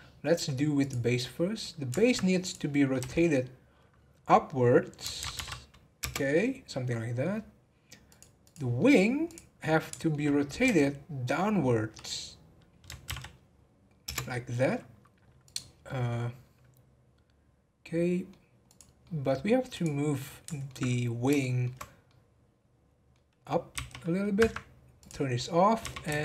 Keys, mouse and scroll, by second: 0.8 click, 1.3 scroll down 1, 1.6-2.4 middle drag, 2.4 click, 6.3-8.1 middle drag, 8.1 click, 8.4 click, 8.8-9.2 middle drag, 9.2 click, 9.6-10.6 middle drag, 10.6 r, 15.4 click, 15.8-18.6 middle drag, 18.6 click, 19.0-19.7 middle drag, 19.7 click, 20.2-21.8 middle drag, 21.8 scroll up 2, 22.0-23.7 middle drag, 23.7 g, 24.9 click.